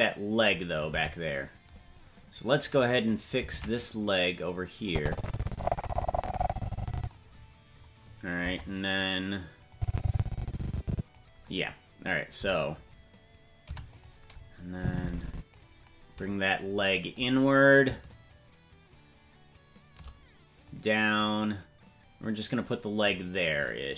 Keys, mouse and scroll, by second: 1.0 ctrl+Tab, 1.9 scroll down 1, 3.0 right click, 3.0-3.5 scroll down 2, 3.5 ctrl+Tab, 3.9 right click, 4.9-7.2 drag, 8.4 KP_0, 9.7-11.2 drag, 13.6 i, 14.7 click, 16.4-17.7 scroll down 4, 18.1-20.0 shift+drag, 20.6-23.2 drag.